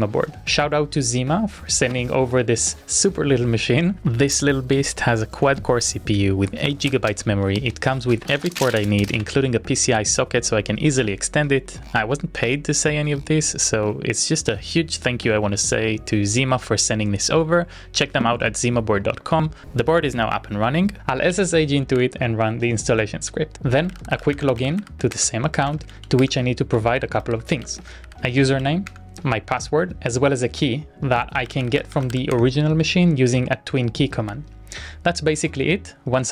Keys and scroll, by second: 19.4 Return, 21.0-22.5 typing.